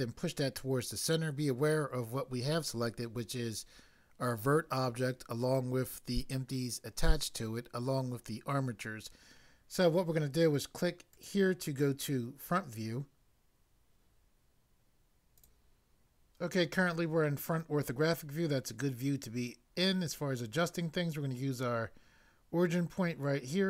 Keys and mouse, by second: 11.1 click, 15.4 click, 15.4 click.